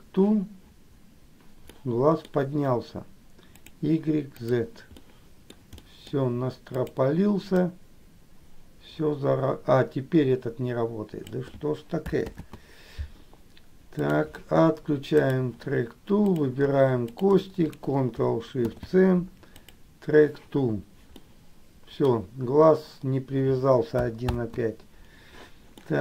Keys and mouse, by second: 0.0 ctrl+shift+c, 1.9 middle click, 3.7 click, 4.6 click, 5.1 middle click, 6.0 middle click, 7.0 click, 7.9-11.6 drag, 12.4 ctrl+z, 14.2 click, 16.5 click, 17.2 shift+click, 21.4 ctrl+shift+middle click, 24.4 ctrl+z, 25.9 middle click.